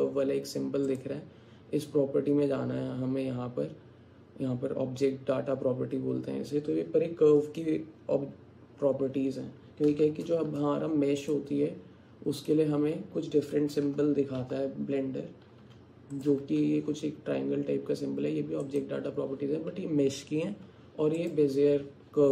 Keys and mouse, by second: 1.0 click, 10.1 shift+a, 13.9 g, 18.8 click, 21.3 click.